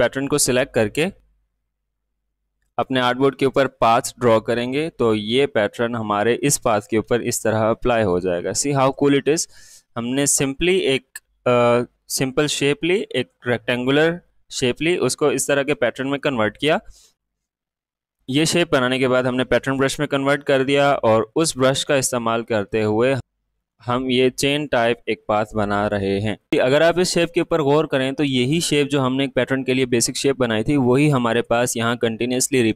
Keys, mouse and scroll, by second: 2.7-5.2 drag, 5.2-5.5 alt+scroll up 1, 6.8 alt+scroll down 1, 7.0 space, 11.1 alt+scroll down 1, 12.0 space, 12.3 click, 12.7 space, 21.9 space, 22.1 click, 22.4 space, 23.2 click, 23.6 ctrl+z, 24.2-26.2 drag, 26.2 space, 26.4 click, 26.5 space, 27.7-31.1 drag.